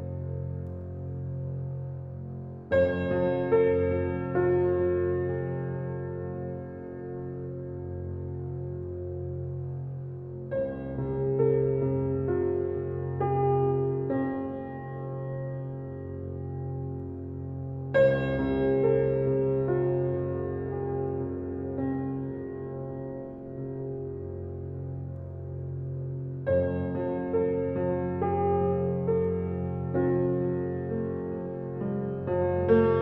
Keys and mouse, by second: 0.0 click, 0.5-1.6 drag, 1.8 click, 2.8-3.9 drag, 5.3-6.9 drag, 7.4 click, 8.1-9.7 drag, 10.2 click, 10.7 click, 11.1 click, 11.4 click, 11.8 click, 13.0 click, 13.6 click, 14.2 click, 16.1 click, 17.1 Delete, 18.5-22.8 drag, 23.6 click, 23.8 click, 24.4-26.8 drag, 28.0 click, 29.1-33.0 Page_Up, 29.8 click, 32.1 click.